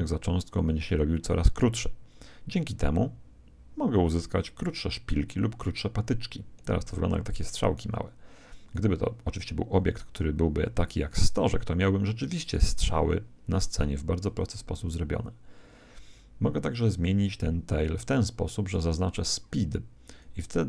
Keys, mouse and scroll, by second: 17.2 click, 20.0 click.